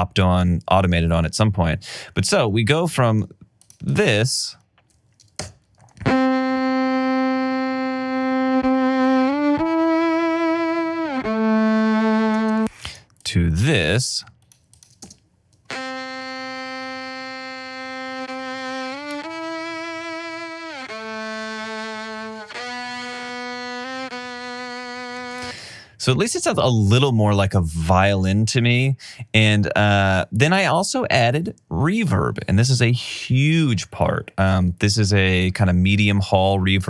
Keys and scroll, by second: 5.6 space, 12.6 space, 15.2 space, 25.4 space.